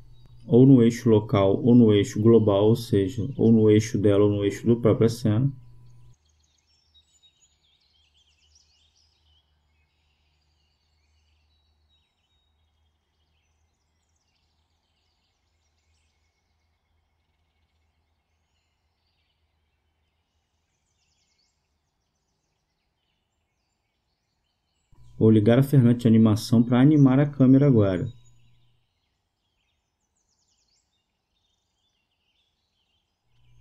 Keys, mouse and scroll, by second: 2.5-4.5 drag, 6.9-8.5 drag, 10.1 click, 17.4-18.9 drag, 19.3-21.7 drag, 30.7-32.4 drag, 33.2 right click.